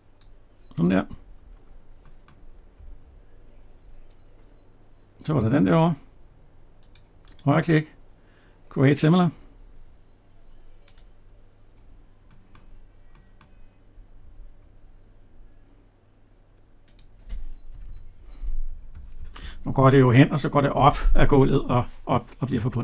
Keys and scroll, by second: 17.7 Escape.